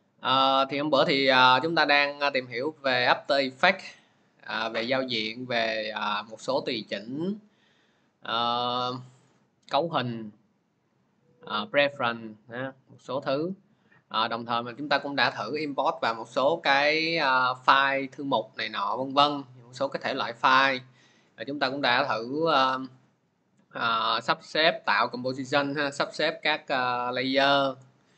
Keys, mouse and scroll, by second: 3.3-28.1 drag.